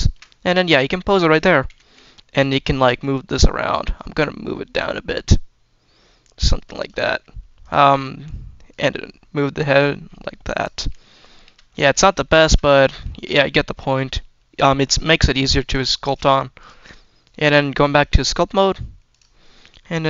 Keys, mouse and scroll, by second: 0.0 shift+middle click, 0.3 scroll down 2, 1.1 click, 1.6 r, 2.9 click, 3.1-4.2 drag, 4.5-6.5 drag, 7.5 click, 8.5-10.5 drag, 10.8 shift+middle click, 10.9-11.4 shift+middle drag, 11.7-12.0 scroll down 1, 12.1 shift+middle click, 12.9 shift+middle drag, 13.2-13.9 scroll up 2, 15.6 click, 16.4 click, 19.1 click.